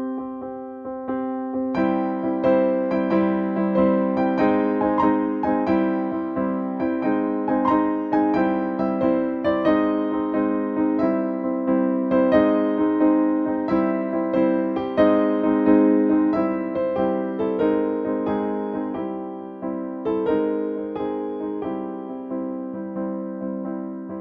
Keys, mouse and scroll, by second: 4.7-7.5 drag, 9.4-12.8 drag, 12.9 Down, 17.1 click, 18.9 Return, 20.4-21.9 drag, 22.0 Down.